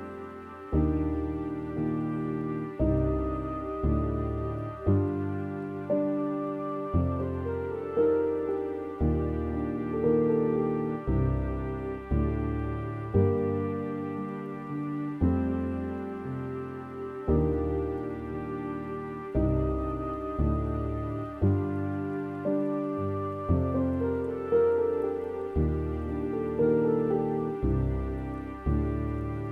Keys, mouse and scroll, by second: 4.5 click, 8.6 click, 10.6-17.1 middle drag, 17.1-19.6 drag, 20.4 middle click, 20.9-21.5 scroll up 3, 21.5-22.2 scroll down 9, 22.2 middle click, 22.8-23.9 scroll up 2, 23.9-24.9 scroll up 1, 24.9-26.4 scroll up 1, 26.4 click, 28.9-29.5 drag.